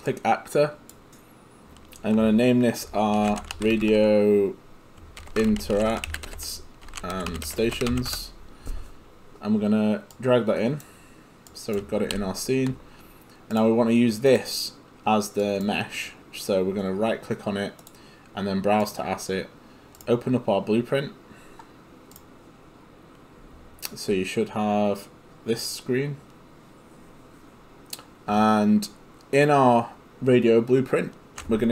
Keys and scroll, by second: 2.9-8.4 typing, 12.1 g.